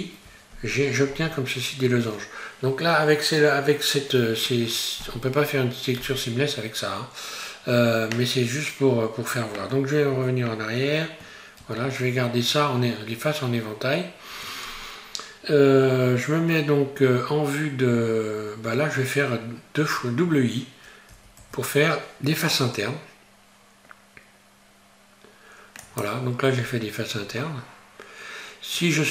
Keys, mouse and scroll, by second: 11.6 ctrl+z, 26.6 scroll up 1, 27.2-28.8 scroll up 3, 28.8-29.1 scroll down 1.